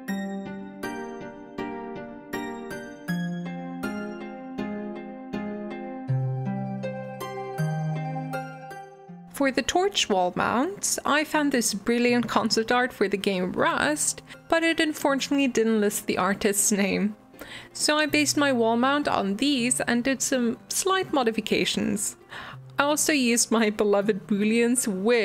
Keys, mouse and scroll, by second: 0.4 click, 0.6 r, 1.5 ctrl+z, 1.6 click, 1.8 r, 2.3-2.6 scroll up 4, 2.4 shift+middle click, 2.6 shift+middle click, 3.1-3.4 drag, 3.4-7.2 typing, 5.0 shift+middle click, 5.2 click, 5.5 shift+middle click, 5.7 click, 6.1 shift+middle click, 6.4 click, 7.1 click, 7.9 shift+middle click, 8.1 click, 8.2 s, 8.6 shift+middle click, 8.8 click, 8.9 r, 9.1 scroll down 2, 9.2 click, 9.6 click, 9.7 middle click, 9.8 e, 10.6 middle click, 11.2 middle click, 11.4 click, 11.4 middle click, 11.6 click, 11.8 g, 12.5 middle click, 13.0 click, 13.3 click, 13.5 alt+z, 13.8 alt+z, 13.9 middle click, 14.0 g, 14.7 Tab, 14.8 middle click, 15.2 g, 15.6 middle click, 15.8 Tab, 15.8 middle click, 16.1 click, 16.2 alt+z, 16.4 click, 16.6 middle click, 16.8 alt+z, 16.9 middle click, 17.3 g, 18.0 click, 18.5 i, 19.6 s, 20.2 scroll down 1, 20.3 middle click, 21.0 e, 21.6 middle click, 21.8 scroll up 1, 22.0 middle click, 23.0 ctrl+z, 23.2 ctrl+z, 23.3 ctrl+z, 23.6 Tab, 23.7 Tab, 23.9 Tab, 24.5-25.2 typing.